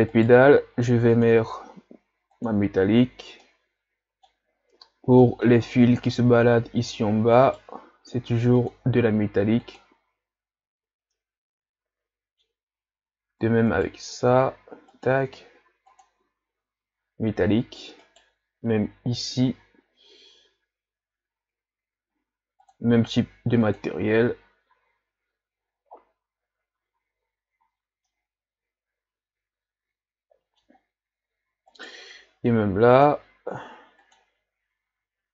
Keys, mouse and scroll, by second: 0.2 right click, 2.9-3.4 drag, 3.4-4.8 middle drag, 4.8 scroll up 1, 5.2-5.7 middle drag, 5.7-7.5 scroll down 3, 7.5 right click, 8.6 right click, 9.3-10.0 right drag, 10.0-11.2 drag, 11.2-12.7 middle drag, 12.7 scroll up 1, 13.7 right click, 16.2-18.1 drag, 18.1 right click, 24.0 click, 24.9 a, 25.6-26.8 scroll down 2, 27.1 a, 27.6 a, 28.1-31.8 middle drag, 31.8 right click, 34.3 click, 35.0 a.